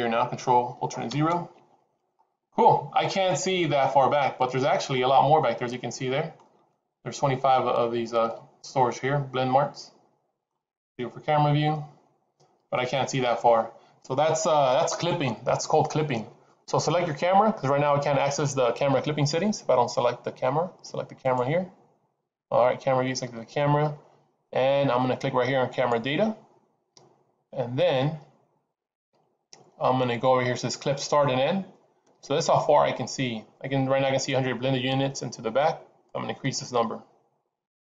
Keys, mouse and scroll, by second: 1.0 ctrl+alt+KP_0, 2.1-2.6 scroll up 7, 4.1 middle click, 5.5 shift+middle click, 6.6 middle click, 7.4-8.2 scroll down 12, 8.2 middle click, 10.8 KP_0, 21.7 click, 25.6 click, 36.0 click.